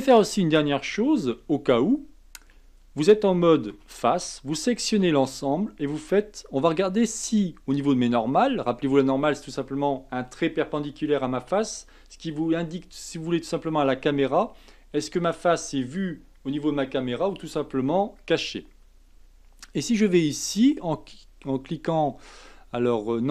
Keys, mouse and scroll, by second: 1.3 Tab, 2.5 a, 3.7 3, 4.6 a, 4.9 a, 5.2 a, 20.0-23.0 drag.